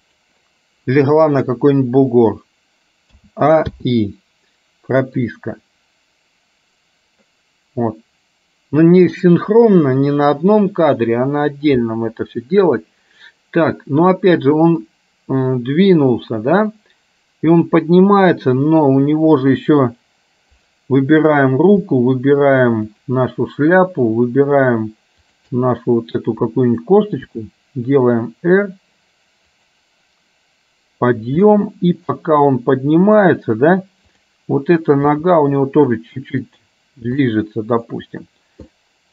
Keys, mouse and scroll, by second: 3.2 a, 3.9 i, 5.4-9.4 drag, 15.0-17.7 drag, 18.7 click, 25.5 shift+click, 27.2 r, 31.6 middle click, 35.2 g, 37.4 middle click, 38.0 scroll down 1, 38.7-39.1 scroll up 1.